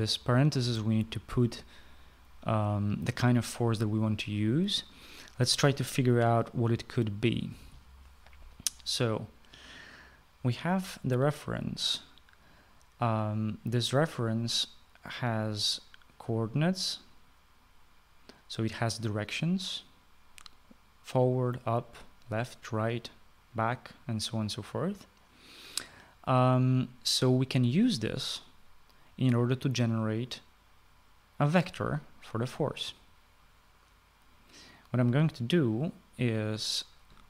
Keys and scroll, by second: 8.5-9.2 typing.